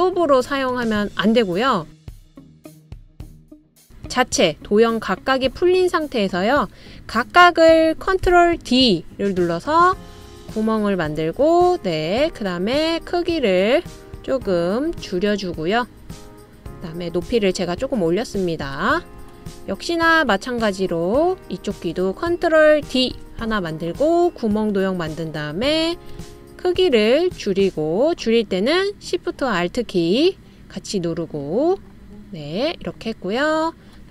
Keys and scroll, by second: 8.6 BackSpace, 9.1 super+d, 24.1 super+d.